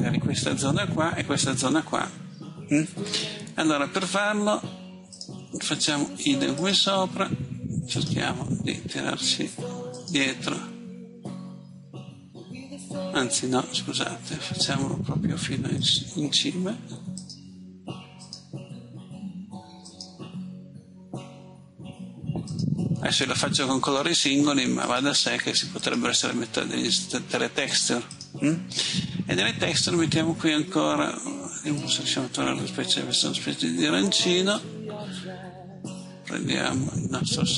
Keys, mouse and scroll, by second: 13.7 Escape, 15.8-25.8 drag.